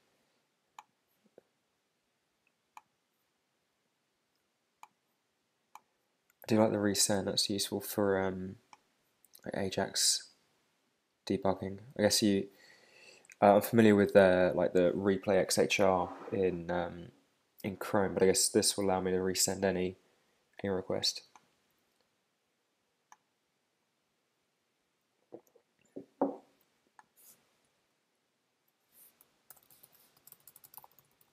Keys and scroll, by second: 27.6 shift+super+Right, 30.1 shift+r.